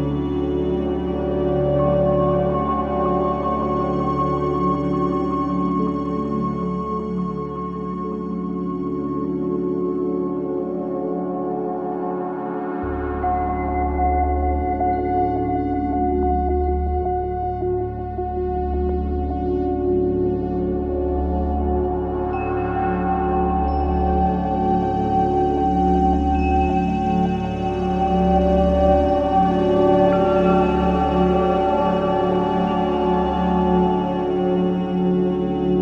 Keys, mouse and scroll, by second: 1.0 ctrl+z, 1.7 click, 2.7 ctrl+z, 3.5 click, 4.0 ctrl+z, 5.0 click, 8.1 ctrl+z, 8.7 click, 11.7 ctrl+z, 12.7 click, 14.0 ctrl+z, 14.8 click, 15.2 ctrl+z, 16.2 click, 17.9 ctrl+z, 18.3 click, 22.3 click, 29.2 ctrl+z, 29.6 click, 31.6 alt+middle click, 31.8 ctrl+z, 32.7 ctrl+z, 33.3 click, 34.2 click, 34.8 scroll down 1, 35.1 alt+middle click, 35.7-35.8 scroll up 1.